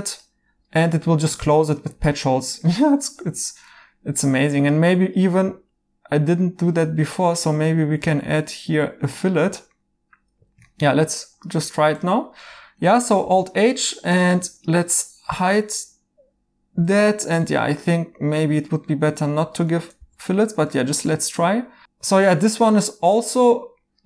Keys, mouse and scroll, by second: 2.6 right click, 3.7 2, 6.8 Escape, 13.2 alt+h, 16.1 Tab, 16.7 h, 17.1 right click, 19.9 h, 20.2 right click, 23.0 right click.